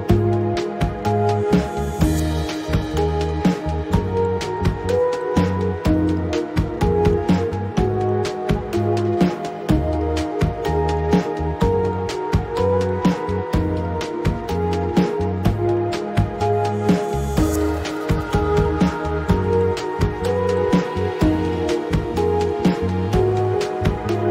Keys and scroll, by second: 16.1 5, 16.5 Return.